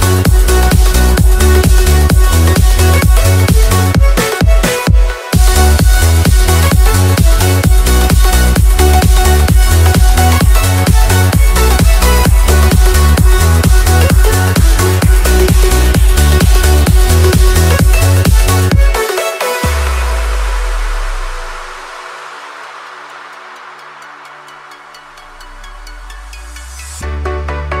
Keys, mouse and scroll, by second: 3.5-4.6 typing, 5.3 click, 6.4 click, 8.0 right click, 10.0 click, 12.1-14.2 typing, 14.9 click, 16.6-17.8 typing, 18.3 click, 19.3-20.5 right drag, 21.0 click, 24.7-26.5 typing, 27.0 Return.